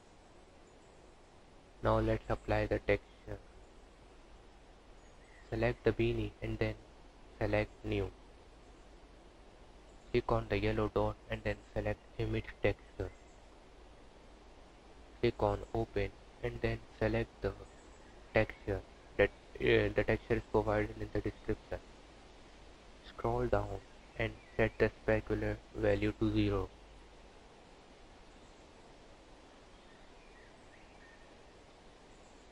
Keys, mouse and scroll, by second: 0.3 Tab, 1.7 click, 6.0 click, 9.3 click, 14.7 click, 22.2-22.9 scroll down 3, 22.9-24.6 scroll down 3, 29.7 click.